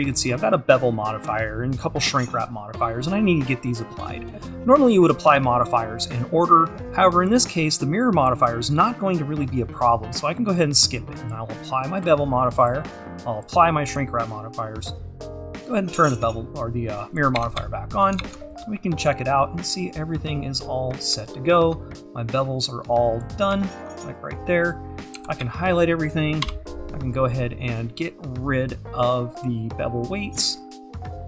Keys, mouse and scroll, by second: 8.3-16.9 drag, 17.4 Tab, 18.6 scroll up 2, 20.8 scroll up 2, 21.9-22.4 scroll up 2, 23.6 `, 24.5-25.2 scroll down 2, 25.2 a, 25.4 `, 26.4 n, 29.9 click, 30.6-31.2 scroll down 2.